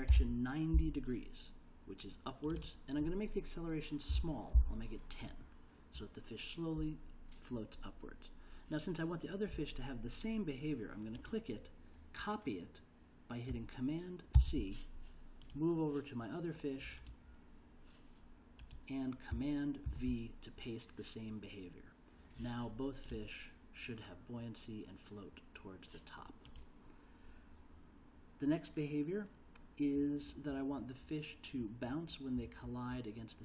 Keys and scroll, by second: 0.0-0.7 typing, 4.1 1, 5.2 0, 14.3 super+c, 19.8 super+v.